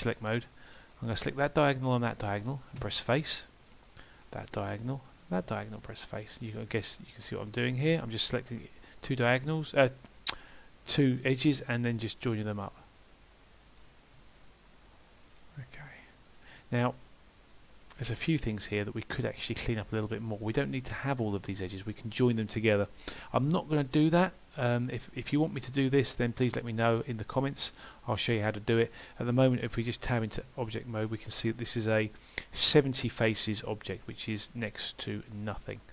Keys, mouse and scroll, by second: 0.0 click, 0.7 middle click, 1.8 shift+click, 2.8 f, 4.2 click, 5.2 shift+click, 5.9 f, 6.5 click, 7.4 shift+click, 8.6 f, 9.2 click, 10.4 click, 11.6 f, 12.6 click, 13.7 shift+click, 14.5 f, 15.3 click, 16.4 shift+click, 16.9 f, 17.5 middle click, 23.4 middle click, 27.1 middle click, 33.1 middle click.